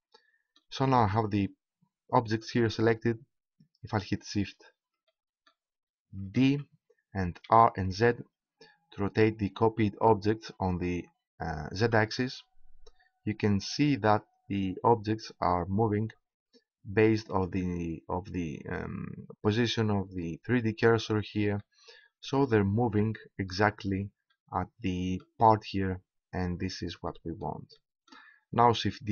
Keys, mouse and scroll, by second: 0.3-2.2 middle drag, 4.5 middle click, 5.2-6.5 middle drag, 6.5 shift+d, 18.2-19.5 drag, 21.5 middle click, 23.4 middle click, 24.5 middle click, 25.0-26.2 middle drag, 27.1-29.1 middle drag.